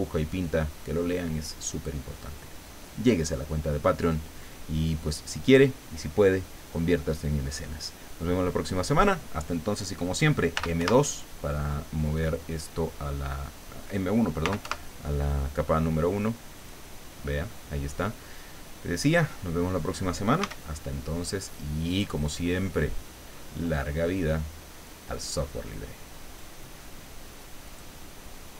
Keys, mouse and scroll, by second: 10.3-11.3 typing, 14.2-15.1 typing, 16.6 click, 17.1-17.4 scroll down 1, 17.5 middle click, 18.6-19.9 middle drag, 20.4 s, 21.9 click, 22.4 scroll down 1, 22.6 middle click, 25.0-26.6 drag, 27.7 click.